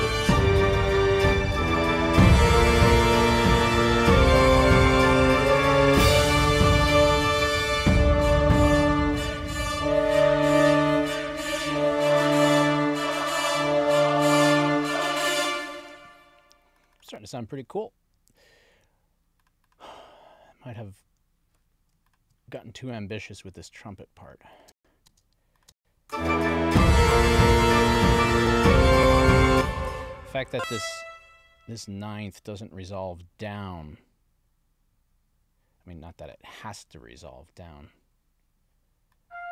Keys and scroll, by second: 15.8 space, 24.7 space, 29.5 space.